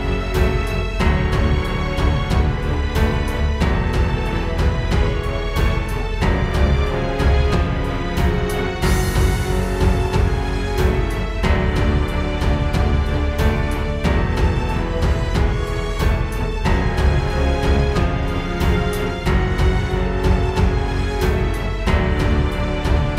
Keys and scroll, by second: 2.7 super+z, 5.4 super+z, 17.7 super+z, 19.8 space, 20.1 space.